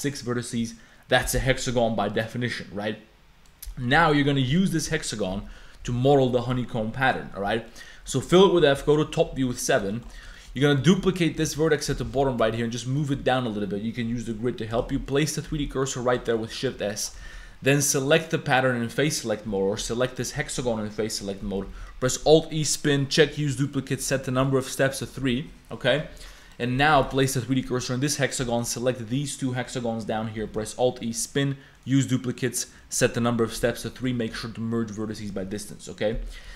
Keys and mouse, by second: 3.7 click, 4.9 KP_Decimal, 5.3 Tab, 5.8 f, 7.2 click, 7.7 click, 8.8 KP_7, 9.3 1, 9.7 click, 9.9 shift+click, 10.3 shift+click, 10.8 shift+click, 11.5 shift+d, 12.0 g, 14.8 shift+s, 15.7 shift+s, 16.3 shift+click, 16.7 3, 16.8 click, 17.3 shift+click, 19.8 g, 21.9 alt+e, 23.1-24.4 drag, 25.2 a, 26.1 3, 26.4 click, 27.0 shift+s, 28.5 shift+click, 30.5 alt+e, 31.8 click, 33.7 a, 34.3 m, 36.2 a, 36.5 a.